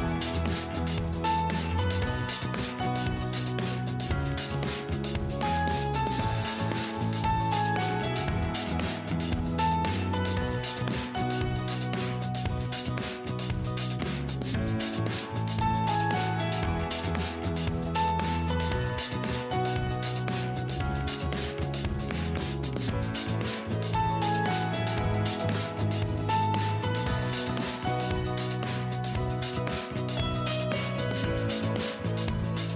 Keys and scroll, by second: 3.3 ctrl+z, 22.6 ctrl+z.